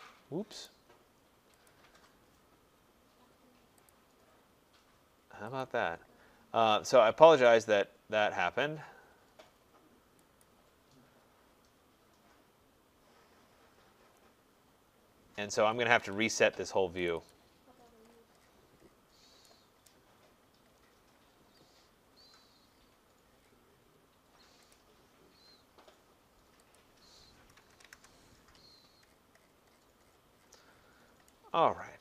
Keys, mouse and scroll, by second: 0.7 right click, 1.7 click, 10.5 click, 14.1 middle click, 14.2 middle click, 14.3 middle click, 14.5 middle click, 15.0 middle click, 15.0 middle click, 15.1 middle click, 15.6 Escape, 15.8 Escape, 16.0 Escape, 17.1 click, 17.3 click, 17.3-17.8 scroll, 17.8-19.2 scroll, 19.9 right click, 20.3 middle click, 20.4 middle click, 20.7 middle click, 21.2-22.0 scroll, 22.2 middle click, 22.7 middle click, 23.0 middle click, 23.4 middle click, 23.4 middle click, 24.7 click, 26.8 click, 27.6-27.9 typing, 28.6-31.1 scroll.